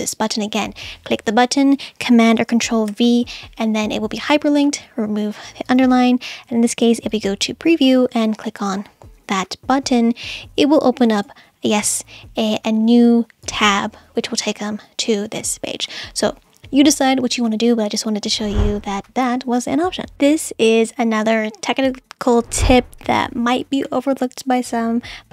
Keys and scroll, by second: 2.9 super+v.